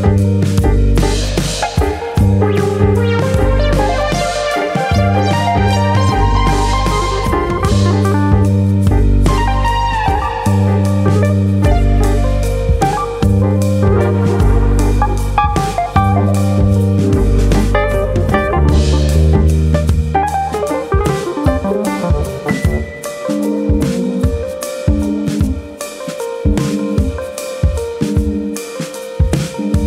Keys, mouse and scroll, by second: 2.0 click, 2.2 middle click, 2.7 click, 3.4 middle click, 3.6 Tab, 3.9 middle click, 4.4 middle click, 4.8-5.3 scroll down 2, 5.3 Tab, 5.6 middle click, 6.3 middle click, 6.5 Tab, 6.8 middle click, 7.7 scroll down 1, 8.1 shift+middle click, 8.7 shift+middle click, 8.9 click, 9.2 middle click, 10.3 shift+click, 10.7 middle click, 11.3 shift+middle click, 15.4 ctrl+s.